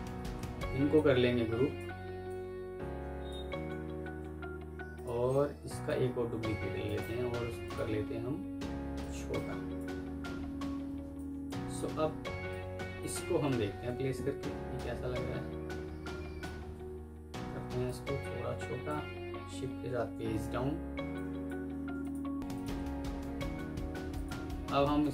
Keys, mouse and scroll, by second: 0.0 F3, 0.8 alt+click, 2.1 alt+click, 3.9 ctrl+g, 6.7 right click, 9.0 right click, 10.6 F2, 11.5 Escape, 12.4 alt+click, 13.6 ctrl+g, 19.6 shift+Page_Down, 20.7 F2, 21.4 Escape, 21.9 ctrl+click, 22.7 Escape, 23.1 F1, 24.5 F2.